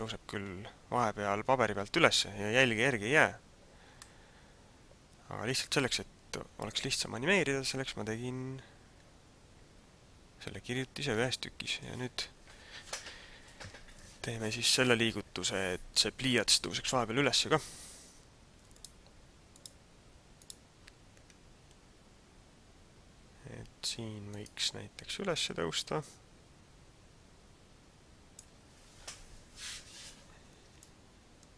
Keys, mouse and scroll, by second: 3.9 middle click, 18.9 click, 21.8 scroll up 1, 24.3 right click, 25.3 click, 30.8 shift+middle click.